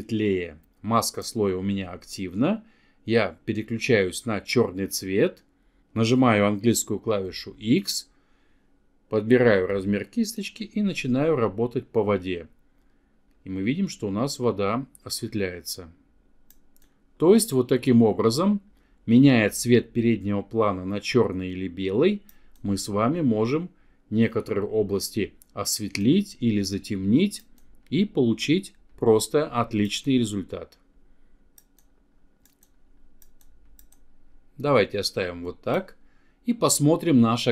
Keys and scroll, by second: 5.4 x.